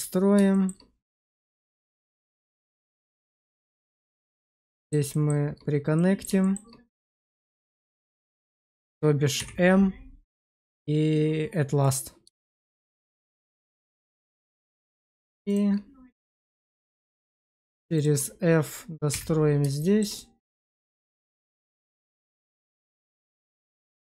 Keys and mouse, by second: 0.4 shift+middle click, 1.0 middle click, 1.7 Tab, 2.1 shift+middle click, 3.4 shift+click, 4.1 1, 4.6 shift+middle click, 5.0 shift+middle click, 5.9 middle click, 6.3 shift+middle click, 7.3 click, 7.7 shift+click, 9.3 m, 12.3 shift+middle click, 13.0 middle click, 16.4 shift+middle click, 17.3 shift+click, 17.9 shift+click, 19.0 f, 19.7 shift+middle click, 20.1 middle click, 20.6 shift+middle click, 22.6 shift+click.